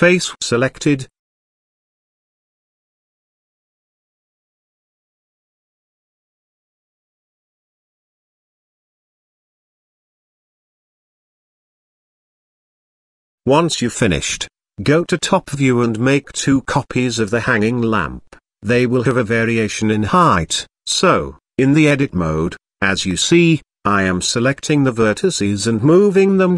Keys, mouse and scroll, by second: 2.1 click, 3.8-5.1 drag, 5.7 Tab, 6.4 click, 7.1-7.7 middle drag, 8.4 middle click, 8.8 shift+middle drag, 10.0 KP_7, 11.1 z, 11.6-11.9 shift+middle drag, 13.3 shift+d, 15.8 shift+d, 17.2-17.8 middle drag, 18.8 KP_0, 20.4 Tab, 21.3 click, 22.5 click, 23.6 g, 26.2 Tab.